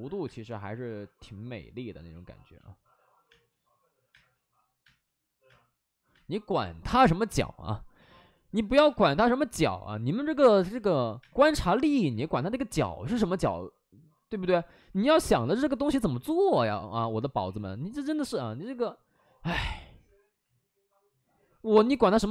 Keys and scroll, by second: 0.2 space, 2.0 ctrl+z, 3.2 space, 4.8 space, 5.4 space, 6.0 space, 10.4 5, 10.5 space, 11.1 space, 12.0 ctrl+z, 14.5 ctrl+z, 14.7 ctrl+z, 16.8 ctrl+z, 19.5 alt+s.